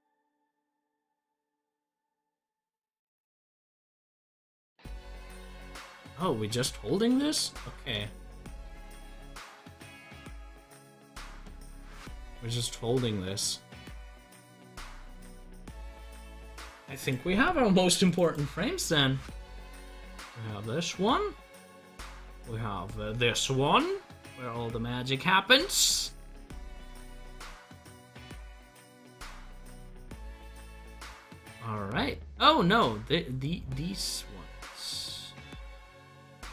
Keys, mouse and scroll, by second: 8.9 ctrl+z, 18.2 double click, 19.5-29.6 drag.